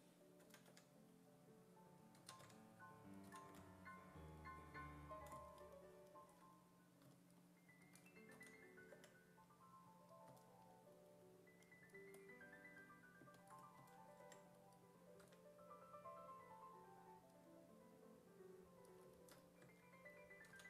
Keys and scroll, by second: 0.0-0.7 typing, 2.2-4.0 typing, 8.4 s, 8.9 5, 10.3 s, 13.8 s, 14.2 5, 15.3 w, 19.6 1, 20.5 s.